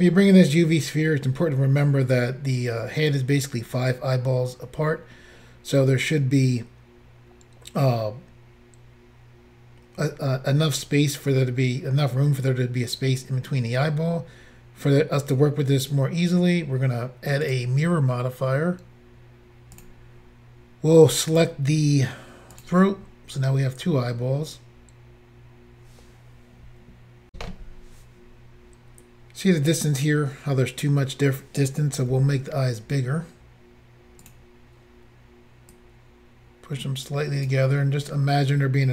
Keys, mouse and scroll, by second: 17.4 click, 17.5 click, 19.7 click, 21.4 click, 22.5 click, 27.3 Pause, 32.1 s, 34.2 click, 34.3 click, 35.7 click.